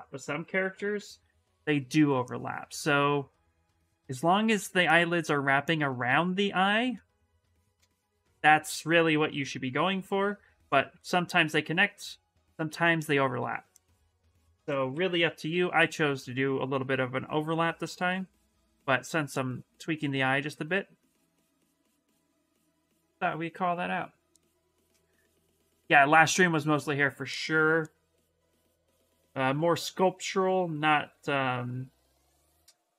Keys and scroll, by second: 0.4 b, 0.7 v, 1.2 s, 11.8 s, 14.2-15.7 typing, 28.1 s.